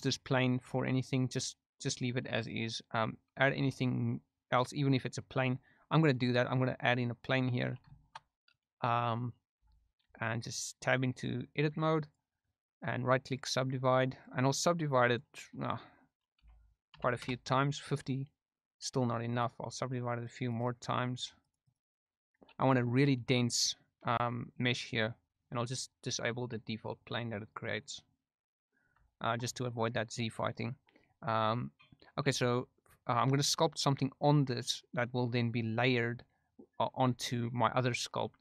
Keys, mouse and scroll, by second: 0.2 right click, 0.6 g, 0.9 right drag, 3.5 shift+a, 7.9 shift+middle drag, 8.5 middle click, 9.5 Tab, 12.0-13.3 right drag, 13.9 right click, 15.0 click, 15.5-17.4 drag, 19.3-20.3 right drag, 20.4 right click, 21.4 right click, 22.7 Tab, 23.8 shift+drag, 27.8 click, 28.4 middle click, 29.1 shift+middle click, 32.2 q.